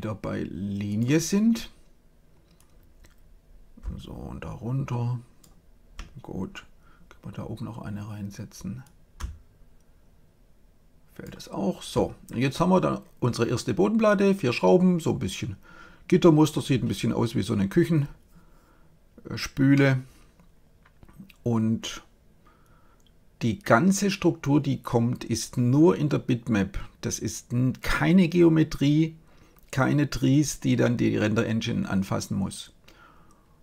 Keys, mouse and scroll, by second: 2.4 click, 8.7-10.4 drag, 19.6-21.4 middle drag.